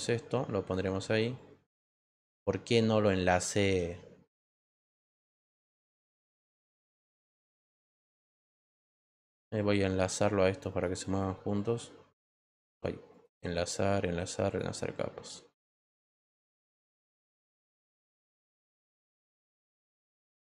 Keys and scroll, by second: 3.8 ctrl+z.